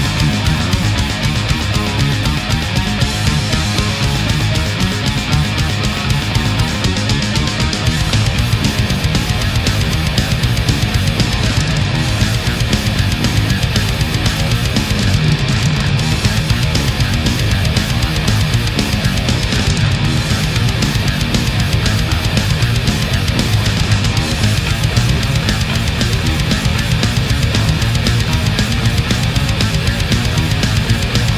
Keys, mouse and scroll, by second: 0.5 shift+right click, 1.6-3.7 drag, 4.2 right click, 4.9-7.1 drag, 7.2-8.4 middle drag, 9.0 right click, 9.7 shift+right click, 10.5-11.9 drag, 12.6 right click, 13.2-15.6 drag, 15.9 right click, 16.6 click, 18.2-19.7 middle drag, 22.6 click, 23.0 space, 24.6 k, 24.7 n, 24.9 i, 26.3 click, 28.3 click, 29.0 click, 29.9 Return, 31.0 middle click.